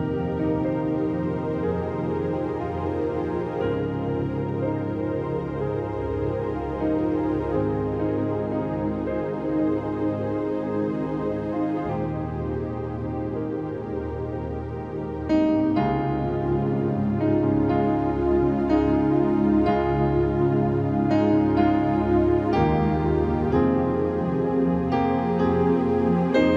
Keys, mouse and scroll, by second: 0.0 click, 0.8 x, 1.0 click, 1.2 click, 1.4 click, 1.7 click, 1.9 double click, 2.0 scroll down 1, 3.2 scroll down 1, 3.2 v, 3.5 space, 3.5 click, 3.9 scroll down 2, 3.9 space, 4.1 click, 5.2 space, 5.2 click, 5.7 click, 6.9 ctrl+click, 7.5 ctrl+t, 7.8-11.2 ctrl+drag, 9.4 Return, 11.2 click, 14.2 t, 15.1 click, 15.5 click, 17.2-19.4 typing, 21.3 click, 21.3 typing, 22.2 click, 22.7-24.1 typing.